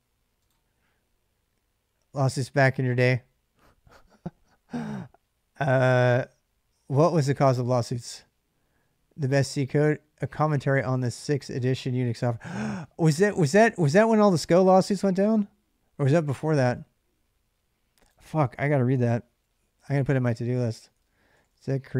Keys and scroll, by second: 18.6 ctrl+a, 18.9 typing, 20.3-21.9 typing.